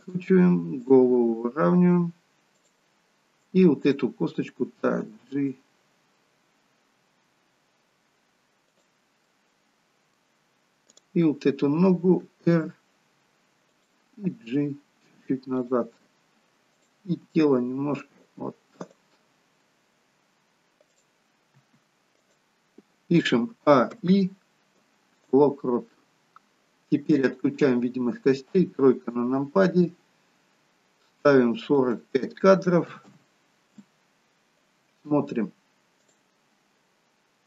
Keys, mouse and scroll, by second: 0.8 click, 1.1 r, 3.8 click, 5.0 g, 9.3 middle click, 11.0 click, 12.3 r, 14.3 g, 17.0 click, 17.4 g, 20.9 click, 21.5 r, 23.5 a, 23.9 i, 26.2-26.9 scroll down 1, 27.1 click, 27.1-28.5 scroll down 1, 28.5 KP_3, 33.6 click, 36.0 click.